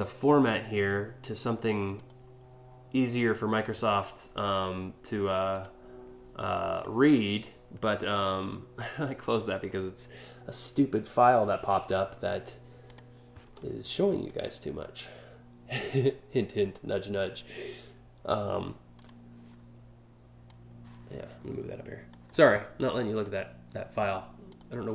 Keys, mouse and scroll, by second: 1.5 click, 5.1 click, 12.5 click, 18.5 click, 20.1-21.7 drag, 22.8 click, 24.1 click.